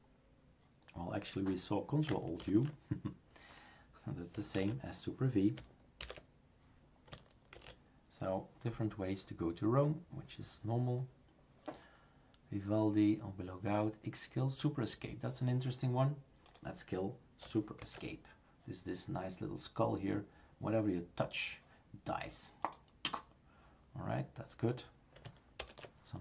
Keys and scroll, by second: 2.4 ctrl+alt+u, 4.6 shift+super+q, 6.0 super+v, 7.6 shift+super+q, 17.8 super+Escape, 25.6 shift+super+Return.